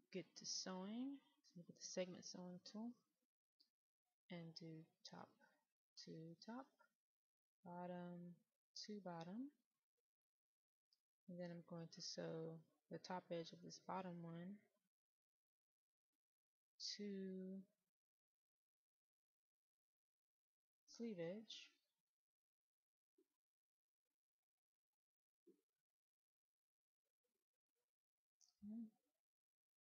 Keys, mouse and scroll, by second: 0.5 click, 1.4 middle click, 4.7-22.4 drag, 23.2-24.5 right drag, 25.1-27.5 drag, 28.0-29.2 scroll down 1, 29.2-29.8 right drag.